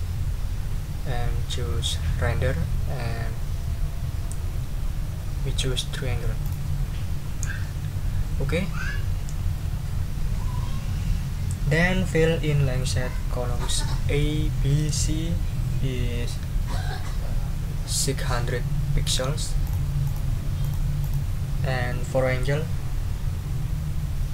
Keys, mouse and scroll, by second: 6.4 click, 19.6 click, 20.0 click, 20.6 click, 21.0 click.